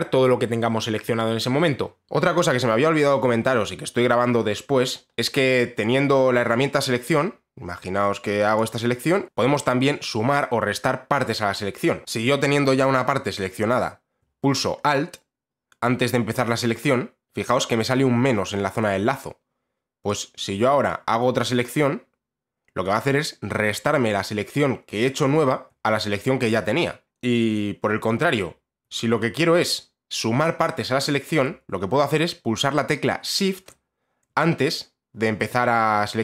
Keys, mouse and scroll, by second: 8.1-9.2 drag, 13.8-25.3 drag, 28.1 alt+click.